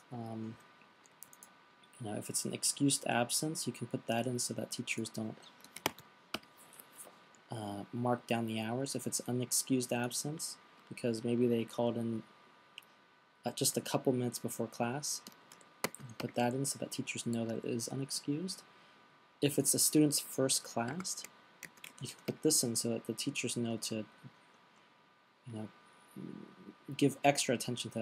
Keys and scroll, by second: 5.9-6.7 typing, 8.4-9.2 typing, 15.9 shift+u, 16.3 a, 21.3-22.8 typing.